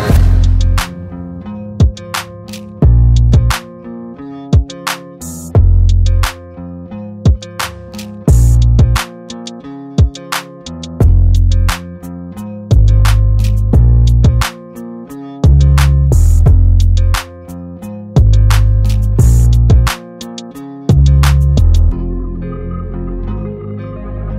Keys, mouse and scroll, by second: 2.6 ctrl+t, 3.2 alt+shift+click, 5.2 alt+shift+click, 6.1 alt+shift+click, 7.0-7.5 Up, 7.6 Return.